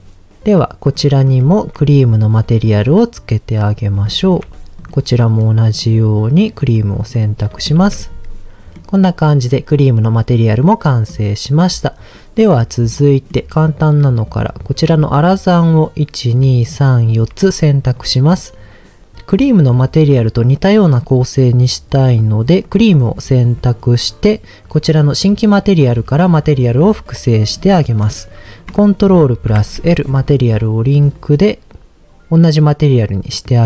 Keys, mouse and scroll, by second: 0.8 click, 1.4 shift+middle drag, 2.2 click, 2.6-3.7 drag, 4.1 shift+middle drag, 4.9 click, 5.8-7.0 drag, 7.3 click, 7.5 scroll down 1, 7.9 ctrl+s, 8.2-8.8 scroll down 2, 8.8 middle click, 10.9 middle click, 11.7 scroll up 2, 12.9 middle click, 14.2 click, 15.6 shift+click, 16.2 shift+click, 17.0 shift+click, 20.8-22.8 drag, 26.4 click, 29.4 ctrl+l.